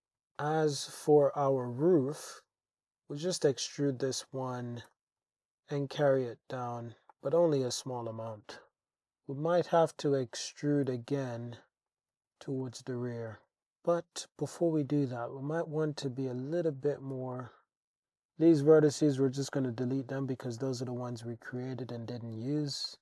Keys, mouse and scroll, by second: 0.0 alt+click, 0.0 super+z, 0.0 e, 1.1 click, 1.6 shift+click, 3.4 e, 4.9 g, 5.2 z, 6.8 click, 7.1 click, 7.9 Tab, 9.0 alt+z, 10.6 e, 11.8 y, 11.9 click, 12.3 alt+z, 12.7 Tab, 13.3 Tab, 13.6 super+z, 14.5 click, 17.2 g, 17.3 y, 18.0 x, 19.5 Tab, 20.6 click, 21.7-22.0 shift+drag, 22.2-22.6 drag, 22.9 shift+drag.